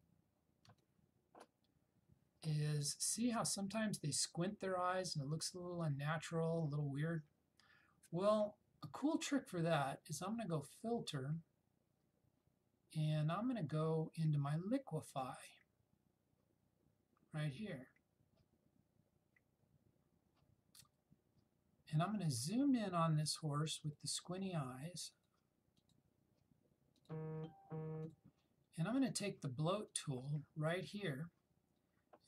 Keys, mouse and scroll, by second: 10.7-11.2 drag, 15.2 click, 24.2 click.